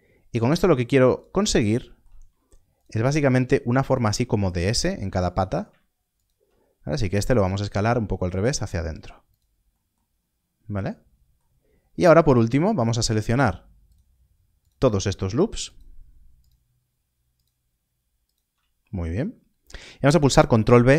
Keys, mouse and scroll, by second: 2.7 alt+click, 7.0 s, 9.3 s, 10.0 scroll down 1, 11.6 scroll up 1, 12.4 alt+click, 20.7 ctrl+b.